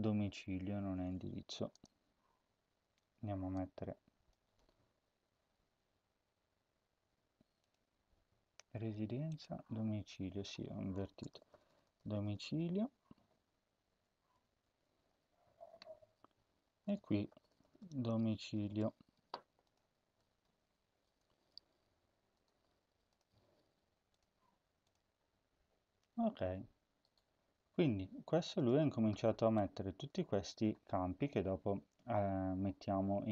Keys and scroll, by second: 10.8-12.9 typing, 12.9-13.8 Right, 14.9 Left, 15.1-16.3 shift+Right, 16.3 shift+Left, 16.4 shift+Left, 16.9-19.2 typing, 19.9 ctrl+s.